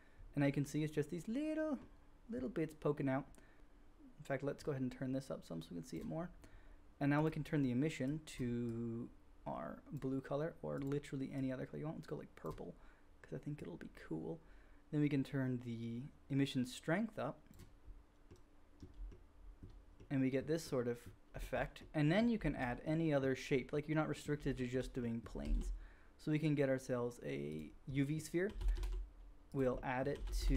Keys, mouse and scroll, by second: 1.0-3.0 drag, 1.0-3.0 right drag, 7.2-10.7 drag, 10.7 middle click, 10.8-13.5 drag, 13.5-24.9 middle drag, 25.4 shift+a, 28.5 g, 29.0-30.5 drag, 29.0 middle click, 29.0 right click, 30.1 g.